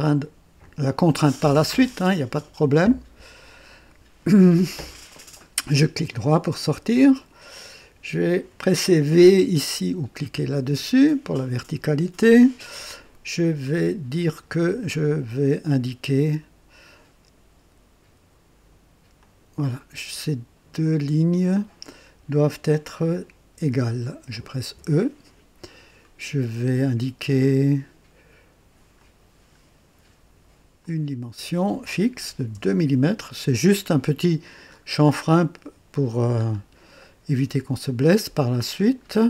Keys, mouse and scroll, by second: 0.6 click, 5.1 right click, 6.5 right click, 8.2 click, 10.7 v, 14.1 click, 19.2 click, 24.7 e, 28.9 click, 30.8 click, 32.2 KP_2, 32.5 KP_Enter, 34.7-35.0 scroll up 2, 36.4-36.7 scroll down 2, 37.0-38.5 right drag, 38.7 scroll down 1.